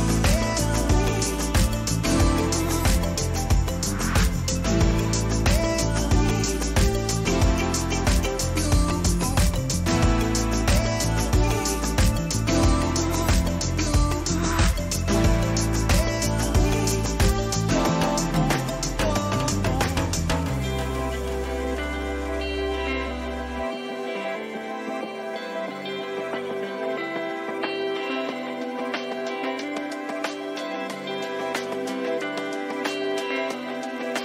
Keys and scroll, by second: 0.0-0.9 typing, 1.1 Return, 1.2 Up, 1.3 Left, 1.4 Up, 2.7 ctrl+-, 3.0 ctrl+t, 3.4 Return, 3.6 ctrl+t, 4.1 Return, 4.5 Return, 4.6 Left, 4.7 Right, 5.0 Right, 5.2 ctrl+j, 5.2 ctrl+t, 5.7-10.7 typing, 9.1 ctrl+j, 11.3 Return, 12.2 Right, 13.6 Right, 16.9 ctrl+-, 27.5 Caps_Lock, 30.9 ctrl++, 32.0 ctrl+-, 33.7 ctrl+alt+z.